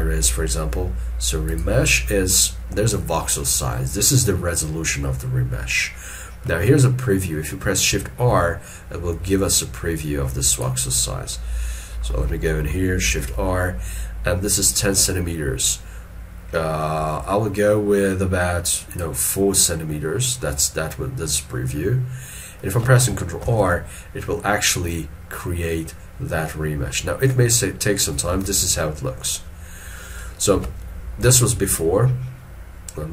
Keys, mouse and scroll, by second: 8.0 shift+r, 9.6 ctrl+middle click, 11.1 scroll down 1, 13.1 shift+r, 19.7 middle click, 23.5 ctrl+r, 28.4 alt+e, 31.3 ctrl+z.